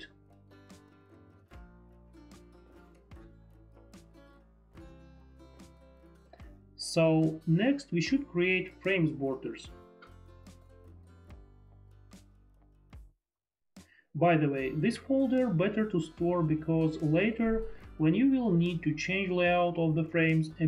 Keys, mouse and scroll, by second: 6.3 click, 10.3 click, 13.0 click.